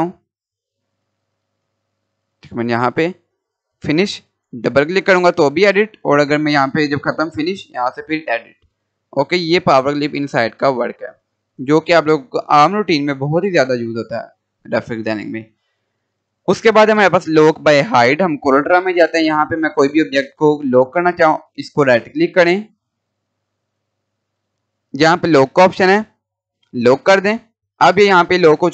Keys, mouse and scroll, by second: 1.2-3.8 drag, 8.6-9.0 scroll down 1, 10.6 Delete, 13.2 click, 18.1 click, 18.9-19.4 scroll down 1, 20.2 click, 21.6-22.5 scroll up 1, 22.5 click, 24.3 right click, 26.9 click, 27.6 scroll up 1, 27.9 click, 28.3 scroll up 1, 28.4-28.7 drag.